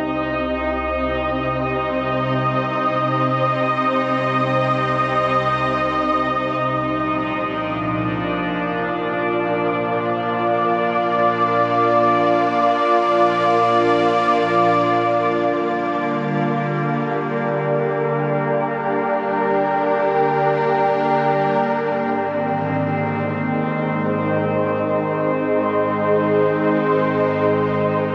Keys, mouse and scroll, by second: 8.2-8.8 scroll down 1, 8.8-11.0 typing, 9.1 click, 9.6 click, 10.0 click, 10.4 click, 10.7 click, 14.2 click, 17.0-19.3 alt+shift+drag, 19.7-20.1 scroll down 1, 20.1-21.4 typing, 20.5 click, 20.9 click, 21.2 click, 21.5 click, 23.5-25.3 typing, 23.8 click, 24.2 click, 24.5 click, 24.8 click, 26.2 scroll up 1, 27.4 click.